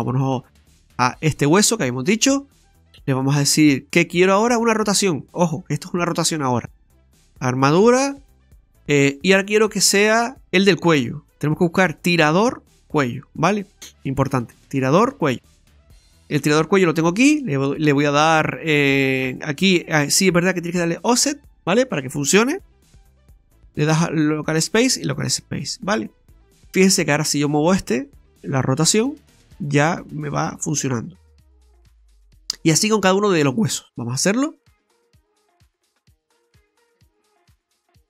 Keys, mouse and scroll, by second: 1.3 right click, 2.8 click, 7.0 click, 8.3 click, 17.1 click, 18.9 click, 23.0 click, 24.5 click, 27.0 right click, 28.7 r, 32.1 ctrl+z, 32.8 shift+middle click, 35.2 right click, 36.0 right click, 36.1 click.